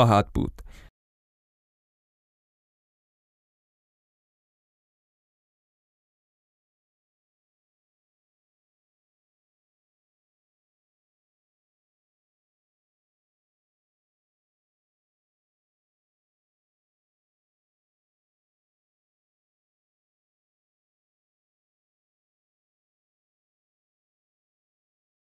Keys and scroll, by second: 10.2 F11.